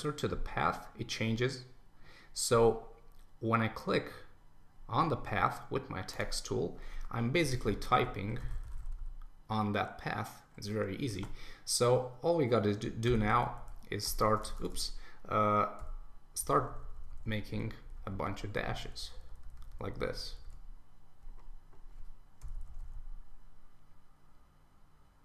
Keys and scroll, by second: 11.2 super+a.